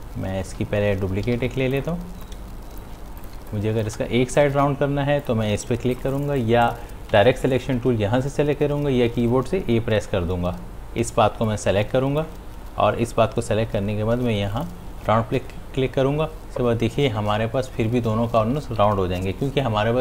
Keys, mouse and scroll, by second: 1.7 ctrl+z, 2.0-3.9 drag, 3.9 space, 5.5 click, 7.2 a, 11.5-14.6 drag.